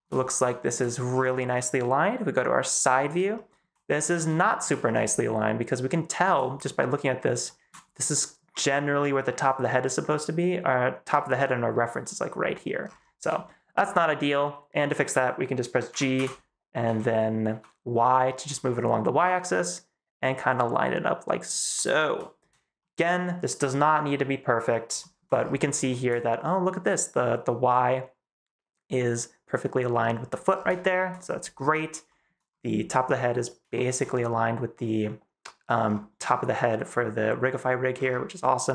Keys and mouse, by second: 0.4 shift+middle click, 3.0 shift+middle click, 4.3 shift+middle drag, 4.9 shift+middle click, 5.6-6.1 shift+middle drag, 7.3 shift+click, 13.3 shift+click, 15.8 g, 16.0 x, 16.7 z, 17.3 y, 22.7 shift+drag, 24.9 shift+middle click, 25.8 shift+middle click, 30.7 shift+middle click, 32.0 shift+click, 33.6 shift+click.